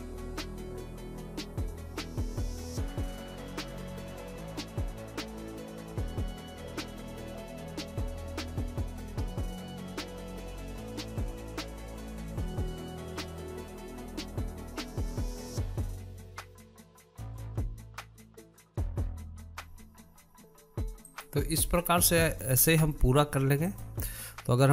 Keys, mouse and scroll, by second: 0.0 scroll up 3, 0.1 shift+middle click, 0.8 click, 1.7 click, 2.7 click, 3.4 scroll down 3, 3.5 shift+middle click, 3.7 click, 4.5 click, 5.3 click, 6.2 click, 6.4 middle click, 7.3 click, 7.9 scroll down 1, 8.2 click, 9.1 click, 9.7 click, 10.4 click, 11.2 click, 11.4 shift+middle click, 11.5 scroll up 3, 11.7 click, 12.8 click, 13.4 click, 13.6 shift+middle click, 14.1 scroll down 4, 14.2 shift+middle click, 14.3 click, 14.5 scroll up 4, 14.6 shift+middle click, 14.8 click, 15.4 click, 15.8 scroll down 2, 15.9 shift+middle click, 16.5 click, 17.0 shift+middle click, 17.1 scroll up 2, 17.2 click, 17.5 scroll down 1, 17.8 click, 18.0 middle click, 18.0 scroll up 1, 18.1 shift+middle click, 18.5 scroll down 3, 18.6 shift+middle click, 18.8 click, 18.9 scroll up 2, 19.0 shift+middle click, 19.5-20.1 scroll down 5, 20.1-23.0 shift+middle drag, 23.0 click, 23.4 scroll down 1, 23.6 middle click, 23.9 scroll up 3, 24.2-24.7 shift+middle drag.